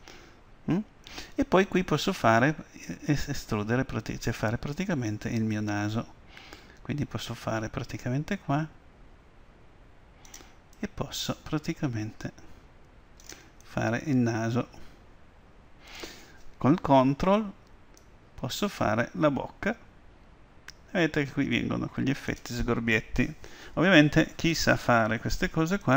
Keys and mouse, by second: 7.4-9.2 drag, 10.8-12.7 drag, 13.6-18.0 middle drag, 18.0-19.9 drag.